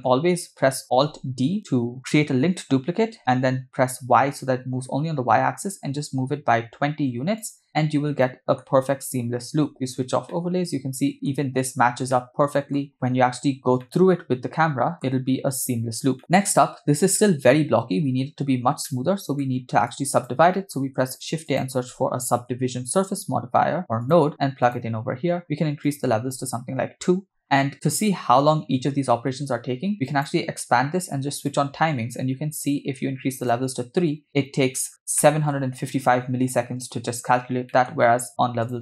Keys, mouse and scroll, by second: 1.3 alt+d, 8.3-8.7 shift+middle drag, 8.7 scroll up 2, 9.4 scroll up 1, 9.7 click, 10.3-11.3 middle drag, 12.1-12.8 shift+middle drag, 12.9 middle click, 13.3 scroll down 2, 13.8-15.1 middle drag, 15.3-15.9 scroll down 3, 16.2 shift+middle drag, 16.7 scroll up 1, 17.2-17.5 shift+middle drag, 18.8 middle click, 19.9 click, 20.6 shift+middle click, 20.8 shift+a, 25.9-26.3 drag, 30.1-31.9 drag, 33.4-34.2 drag, 34.9 scroll up 3, 35.2 shift+middle click, 35.6 scroll up 2, 37.7 middle click, 38.6 click.